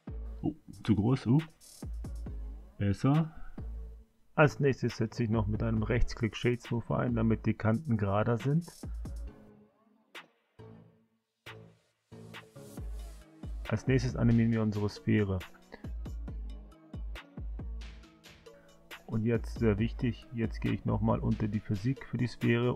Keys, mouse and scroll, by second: 1.2 s, 3.3 right click, 6.1 click, 7.1-8.1 drag, 8.8 i, 10.3 click, 12.5-13.7 drag, 14.6 i, 16.7 click, 20.1 click, 22.3-22.7 drag.